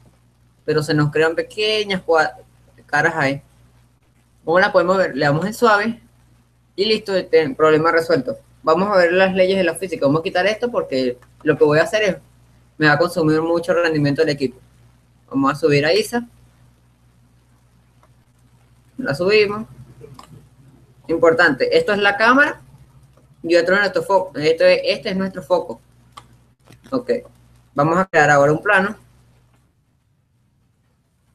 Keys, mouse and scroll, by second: 0.2-2.1 middle drag, 5.0 middle click, 5.8-7.4 drag, 11.6-13.3 drag, 14.2-15.8 drag, 15.1-17.0 middle drag, 16.2-18.5 drag, 19.1-22.2 middle drag, 22.9-24.4 middle drag, 26.6-28.0 middle drag, 29.1 shift+s.